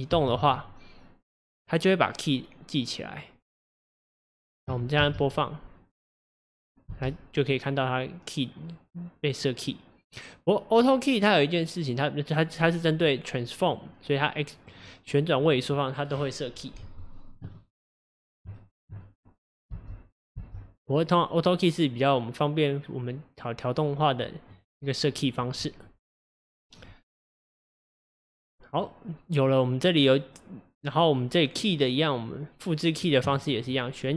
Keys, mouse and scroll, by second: 0.1 g, 3.2-5.0 drag, 5.0 space, 6.9 space, 7.5-10.6 drag, 13.7-18.0 drag, 18.0-18.5 scroll down 1, 18.5-19.7 shift+middle drag, 19.7 space, 20.4 space, 20.9-24.0 drag, 28.8-34.1 drag.